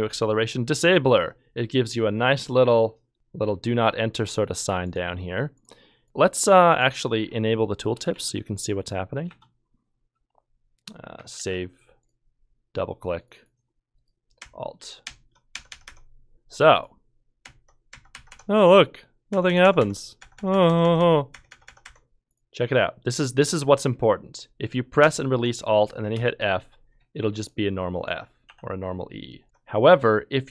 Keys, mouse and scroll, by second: 7.9 BackSpace, 8.1 BackSpace, 9.1 BackSpace, 11.4 ctrl+s, 22.2 f, 26.1 f, 28.5 e, 29.4 ctrl+z.